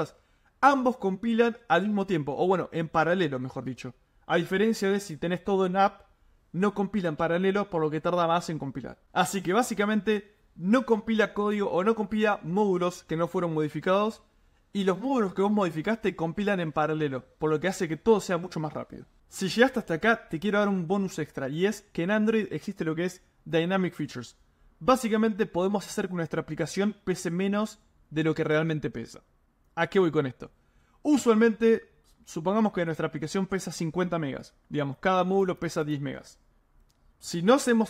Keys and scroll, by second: 20.2 super+m.